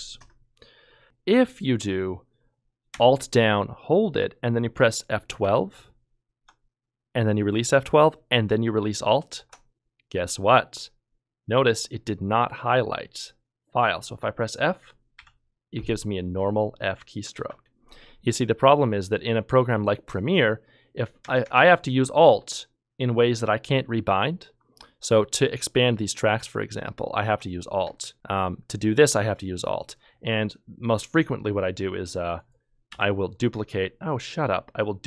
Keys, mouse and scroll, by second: 0.8-1.5 typing, 5.4 alt+F12, 15.1 f, 17.3 ctrl+z, 32.9 ctrl+z, 33.0 Delete.